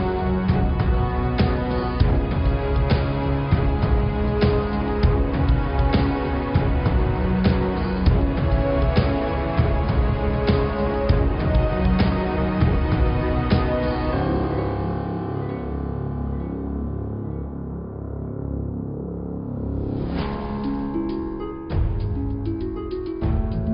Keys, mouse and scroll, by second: 0.0 click, 0.1 Tab, 1.5 click, 2.2 click, 2.9 click, 3.4 shift+a, 22.8-23.7 middle drag.